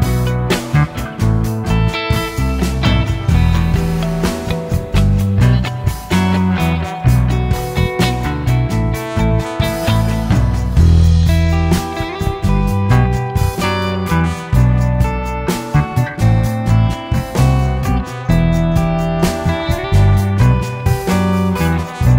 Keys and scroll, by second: 6.9 Delete.